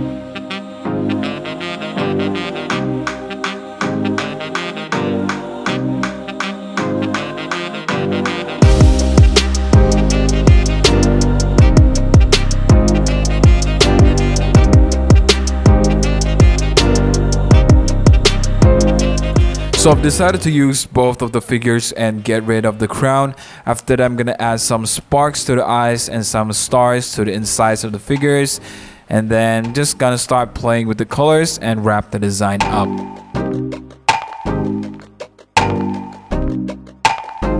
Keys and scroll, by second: 0.0-1.1 typing, 3.3 Return, 3.4 shift+F6, 3.5 b, 3.8 super+d, 3.9 v, 4.0 super+0, 4.1 super+-, 4.4 super+-, 4.4 super+0, 4.8 super+0, 5.0 super+-, 5.1-5.8 typing, 7.0 super+a, 7.2 super+d, 7.3 super+t, 7.3 Return, 7.4 super+t, 7.6 Return, 7.7 super+1, 7.9 super+0, 7.9 super+-, 8.9 BackSpace, 9.0 BackSpace, 16.0 super+i, 16.1 super+0, 16.3 super+-, 16.4 super+-, 16.4 super+0, 16.6 super+1, 16.8 super+0, 16.9 super+g, 17.0-19.4 typing, 17.8 Return, 18.4 Return, 33.3 b, 34.7 v, 34.8 super+-.